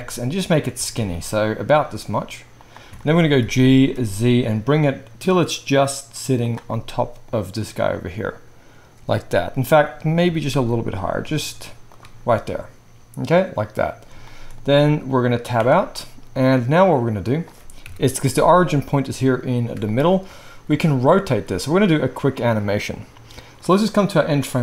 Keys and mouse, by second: 0.7 s, 3.4 g, 6.7 middle click, 10.2 g, 13.2-15.9 middle drag, 15.5 Tab, 15.9-21.5 right drag, 17.8 KP_1, 20.6 r, 21.5-22.5 middle drag, 22.5-24.6 drag.